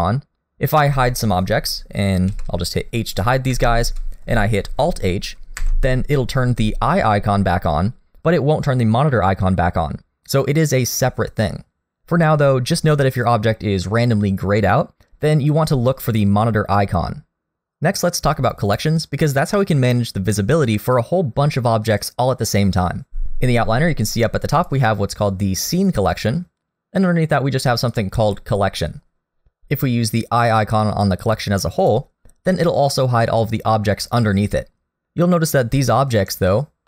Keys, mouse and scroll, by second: 0.7 click, 2.3 h, 3.2 click, 3.5 h, 5.6 alt+h, 16.1 click, 24.6 click, 27.9 click, 31.8 click, 35.0 alt+h.